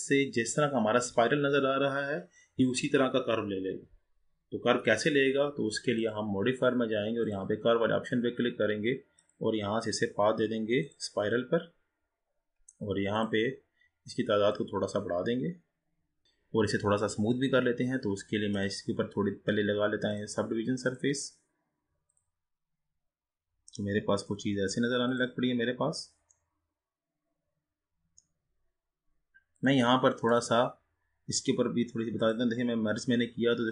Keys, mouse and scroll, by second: 7.4-9.1 drag, 9.2-12.3 drag, 13.2-16.2 drag, 16.2-18.5 scroll up 2, 18.5-20.9 drag, 22.8-24.0 drag, 25.2-26.5 drag, 26.5-29.4 middle drag, 29.6-32.5 drag.